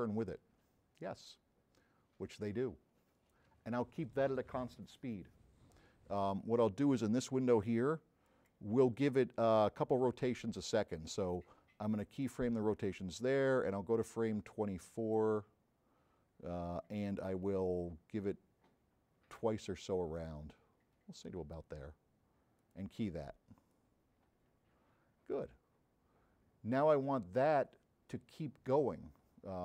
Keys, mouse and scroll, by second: 8.3 click, 12.3 click, 13.9-15.2 drag, 16.4 middle click, 17.8-21.7 drag, 22.6 click, 23.7-28.2 drag.